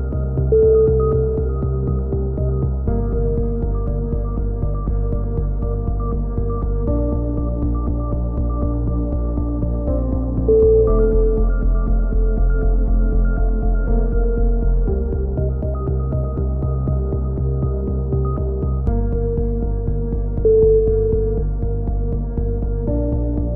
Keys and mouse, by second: 0.9 a, 1.0 z, 2.2 middle drag, 2.8 click, 3.0 middle click, 5.1-5.9 drag, 5.9 z, 7.0 z, 8.9 a, 9.1 Tab, 9.4-9.9 drag, 13.0-13.4 drag, 13.9 click, 14.6 Tab, 14.8 click, 17.3-17.6 right drag, 17.3 KP_3, 17.6 z, 17.9-18.4 drag, 18.7-19.3 middle drag, 19.3 click, 19.3 right click, 21.8 a.